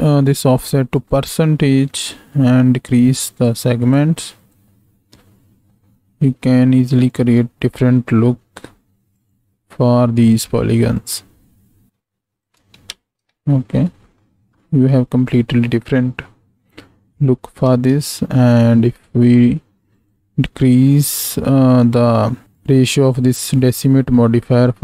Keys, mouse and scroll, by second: 4.0 click, 4.4 click, 4.6-7.1 shift+drag, 9.1-11.4 drag, 11.9 shift+click, 12.9 ctrl+space, 17.7 ctrl+space, 19.9 click, 21.7 click, 22.5 drag.